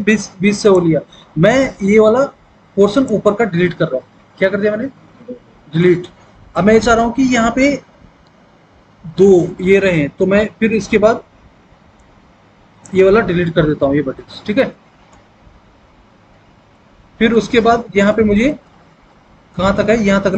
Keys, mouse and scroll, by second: 4.6 Delete, 14.1 Delete.